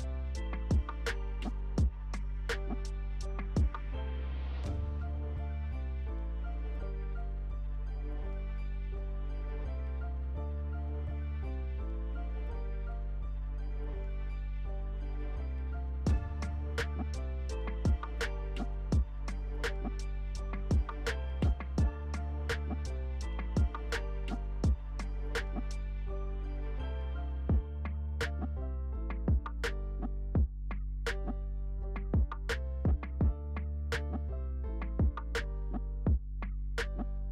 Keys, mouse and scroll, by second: 5.7 alt+click, 23.2-23.7 alt+scroll up 1, 24.2 alt+click, 25.5-29.2 alt+drag, 29.2-30.2 alt+scroll down 1, 30.2 alt+scroll up 1, 31.1-36.5 alt+drag, 36.5-37.3 alt+scroll down 1.